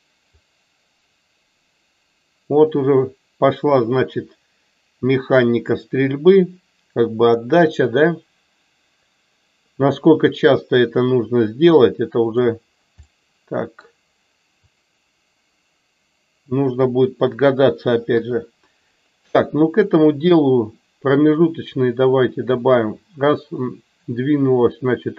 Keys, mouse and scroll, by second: 0.3-12.4 drag, 14.6 click, 21.1-22.5 drag.